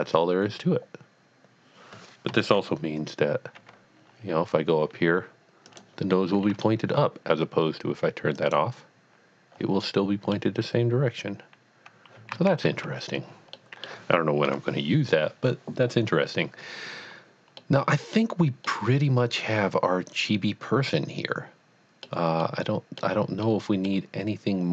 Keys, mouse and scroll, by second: 2.3 right click, 2.3 KP_3, 3.6 g, 5.7 click, 6.2 middle click, 8.3 click, 9.8 middle click, 12.3 ctrl+z, 12.7 ctrl+z, 13.6 middle click, 14.5 KP_1, 17.0 KP_1, 17.1 scroll down 1, 17.6 middle click, 19.5-20.0 middle drag, 20.4-22.1 middle drag, 22.6-24.1 middle drag.